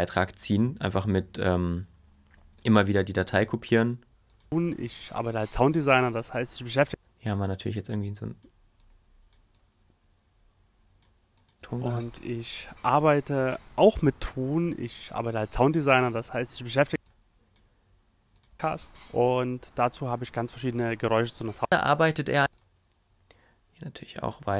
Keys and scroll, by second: 4.4 space, 6.9 space, 11.6 space, 16.9 space, 22.4 space.